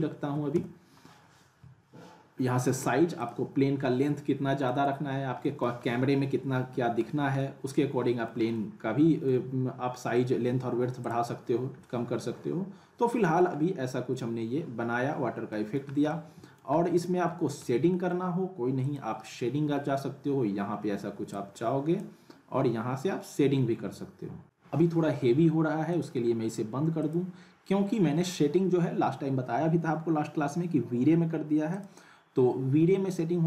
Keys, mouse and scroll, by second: 3.2 click, 4.2-4.7 scroll down 1, 4.7 middle click, 5.0-5.4 scroll up 1, 5.4 middle click, 5.8 scroll up 1, 6.1-7.0 alt+middle click, 7.2 scroll down 1, 7.4-8.3 alt+middle click, 8.5-9.5 alt+middle drag, 11.0 click, 11.8-13.4 alt+middle drag, 13.5-14.5 scroll up 1, 15.5 middle click, 15.9 scroll down 1, 16.1-16.7 alt+middle click, 16.7 scroll up 1, 17.0-17.7 alt+middle click, 17.6 scroll down 1, 17.9 middle click, 18.8 click, 21.3-22.2 drag, 25.9 click, 31.7 click.